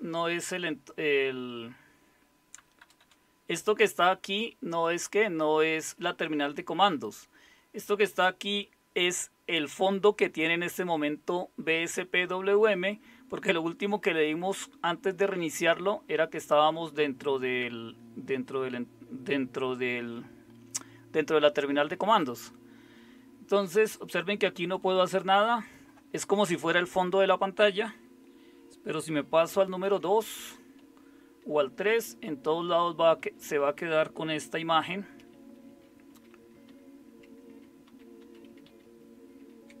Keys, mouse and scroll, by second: 2.8 Return, 3.0 Return, 29.5 super+2, 31.4 super+3, 31.9 super+4, 35.6 super+2, 38.6 super+3.